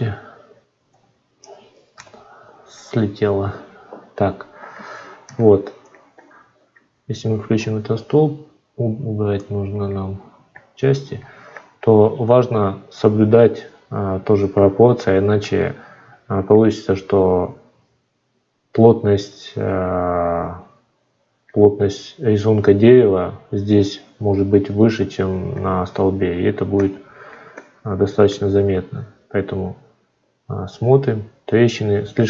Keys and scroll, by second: 0.7 F9.